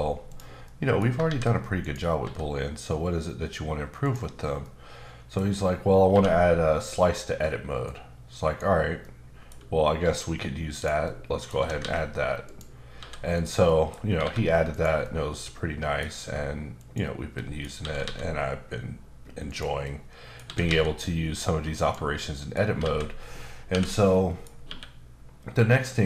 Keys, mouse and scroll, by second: 0.3 click, 0.6 middle click, 1.2 shift+a, 1.8 click, 2.2 s, 4.0 click, 4.6 middle click, 6.1 q, 7.8 click, 9.0 middle click, 9.6-10.0 scroll up 1, 10.0 s, 10.7 click, 11.0 middle click, 11.5 s, 11.8 x, 12.4 click, 12.9 s, 13.3 click, 13.6 middle click, 14.2 3, 14.7 click, 15.0 middle click, 16.7 shift+click, 17.3 middle click, 17.8 typing, 19.4 click, 19.8 middle click, 20.4 typing, 21.8 click, 22.1 middle click, 22.8 alt+a, 24.1 middle click, 24.6 q.